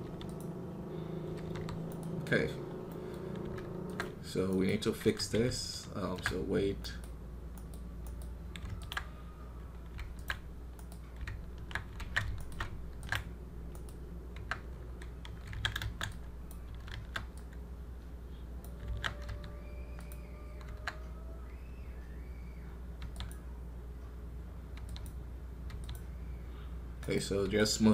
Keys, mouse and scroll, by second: 0.9-1.3 scroll down 1, 2.1-2.7 scroll down 1, 2.7-3.9 middle drag, 3.9 ctrl+Tab, 4.9 KP_1, 8.8 ctrl+Tab, 10.2 ctrl+Tab, 11.9 ctrl+Tab, 13.0 ctrl+Tab, 20.0 q, 21.0 scroll up 2.